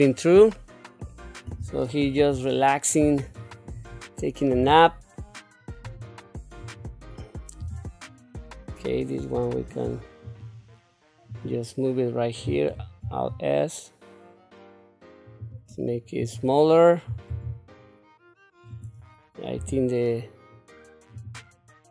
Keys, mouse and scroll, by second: 0.5 middle click, 1.4 KP_7, 2.5 shift+middle click, 3.3 click, 4.5 g, 6.6 click, 7.6 g, 11.3 click, 12.7 alt+s, 16.2 click, 17.3 alt+s, 19.6 g.